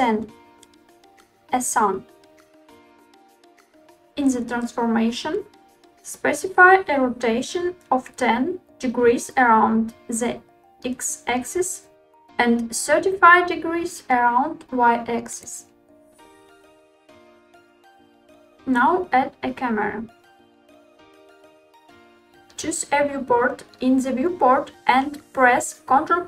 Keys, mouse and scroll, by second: 3.9-6.1 drag, 10.7-14.2 drag, 16.1 middle click, 17.2 middle click, 18.6 shift+a, 22.1 scroll up 1, 22.9 middle click, 24.1-25.1 middle drag, 25.3 middle click.